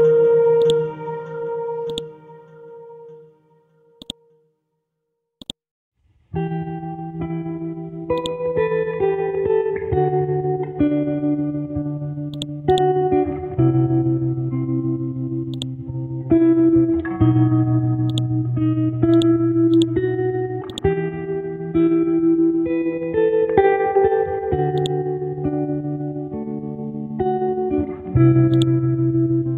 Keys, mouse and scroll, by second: 0.6 click, 2.9 click, 3.0 Delete, 4.0 click, 4.5 Delete, 5.4 click, 6.4 Right, 8.2 click, 9.0 KP_Decimal, 10.0 scroll down 1, 12.3 click, 13.1 scroll down 1, 13.8 scroll up 1, 15.5 click, 16.5 ctrl+z, 18.0 alt+click, 19.1 click, 19.7 right click, 20.2 right click, 20.7 click, 21.8 typing, 22.2 Return, 22.9 scroll up 1, 24.8-27.0 drag, 27.0 scroll down 1, 27.7 scroll up 1, 28.5-29.5 drag.